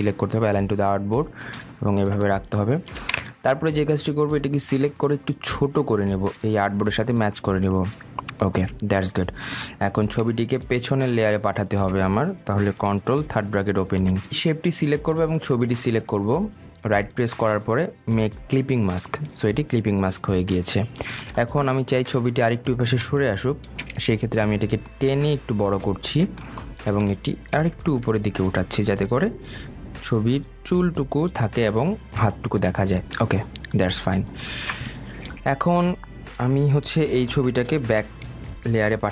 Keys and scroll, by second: 13.5 ctrl+[, 27.8 shift+Up.